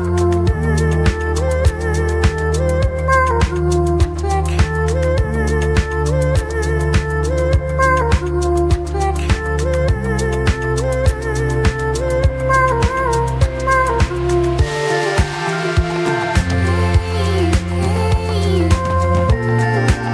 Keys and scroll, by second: 12.3 ctrl+v.